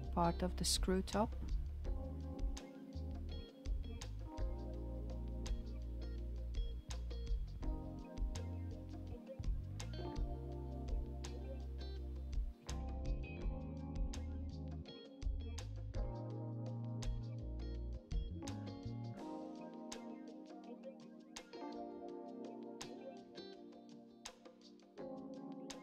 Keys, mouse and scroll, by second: 1.8 ctrl+r, 5.7 alt+z, 6.2 click, 9.2 s, 17.9-21.3 shift+middle drag, 21.3 alt+z, 22.0 alt+z, 24.4 ctrl+r.